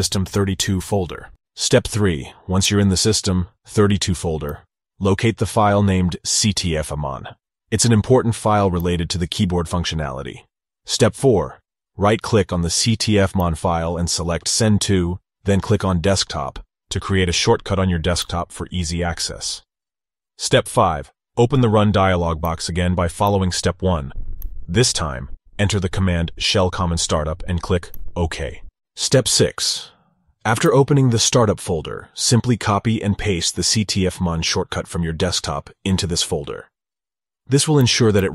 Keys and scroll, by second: 3.3 super+v, 4.5 ctrl+v, 26.2 super+v, 27.9 ctrl+v.